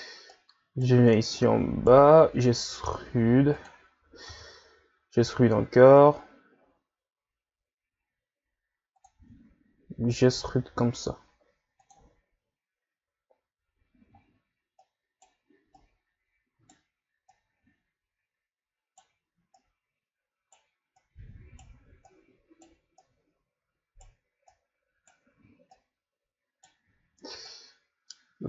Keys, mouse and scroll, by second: 0.3 right click, 1.3 right click, 2.2 e, 4.3 e, 9.1 e, 14.8 right click, 15.8 right click, 17.3 right click, 19.5 right click, 20.9 right click, 22.0 right click, 23.0 right click, 24.5 right click, 25.7 right click, 27.4 right click.